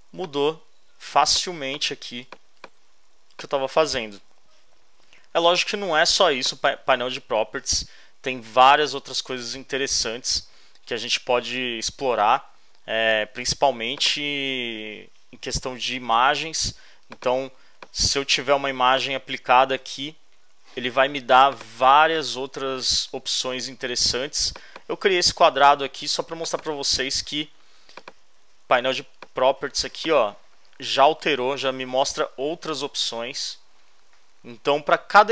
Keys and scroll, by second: 0.0 space, 19.8 alt+shift+BackSpace, 23.6 super+d.